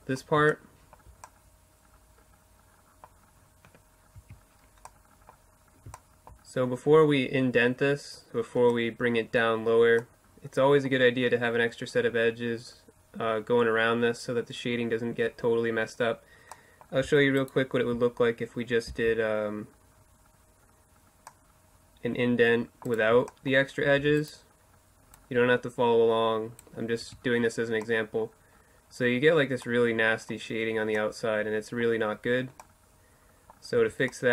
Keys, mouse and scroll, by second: 3.2 Tab, 6.7-13.9 middle drag, 15.5 middle click, 16.4-19.2 right drag, 17.9 c, 22.0-23.7 right drag, 23.1 e, 24.2-26.1 drag, 26.1 Tab, 30.2-33.2 middle drag, 32.8 Tab, 33.7-34.0 ctrl+z.